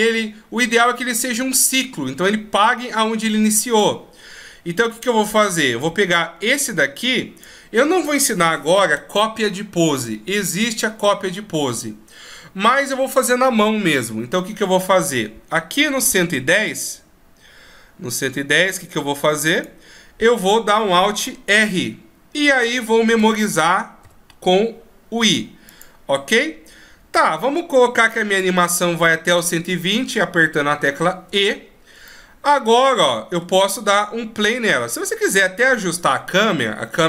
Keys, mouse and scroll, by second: 4.1 click, 17.0 click, 21.8 alt+r, 23.1 a, 23.5 a, 24.3 i, 27.5 click, 31.6 e, 32.4 middle click, 34.0-34.7 scroll down 2.